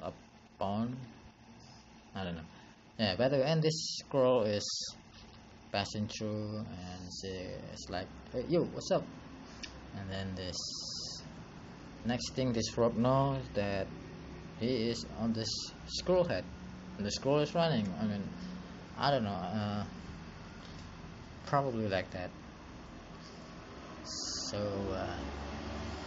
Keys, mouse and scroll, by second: 5.7 ctrl+z, 15.9 click, 20.0 click.